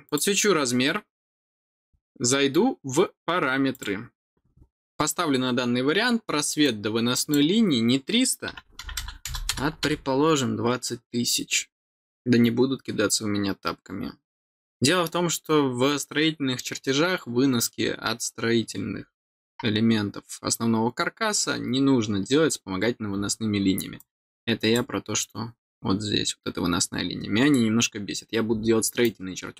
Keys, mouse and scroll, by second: 0.0 click, 3.7 click, 6.6 click, 23.9 click, 29.0-29.5 drag.